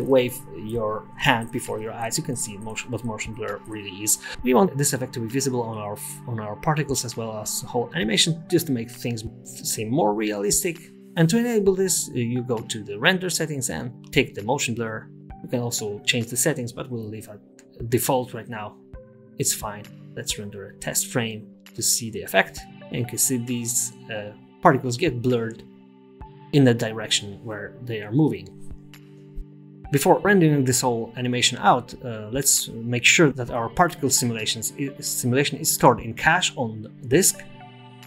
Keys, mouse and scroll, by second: 0.9 click, 3.2 click, 5.5 scroll down 1, 6.5-6.9 scroll down 1, 9.1 click, 10.0 click, 13.8 click, 17.4-17.7 scroll up 1, 18.3-18.7 scroll down 1, 19.9 click, 19.9 KP_0, 35.3 space, 36.9 click.